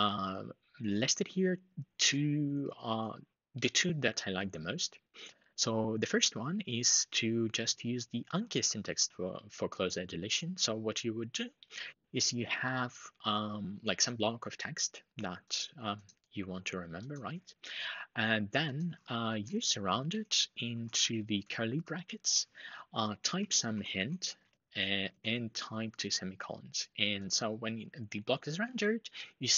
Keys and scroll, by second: 19.3 alt+shift+Right, 19.4 alt+shift+Right, 20.7 typing, 21.5 Left, 22.8-24.7 typing.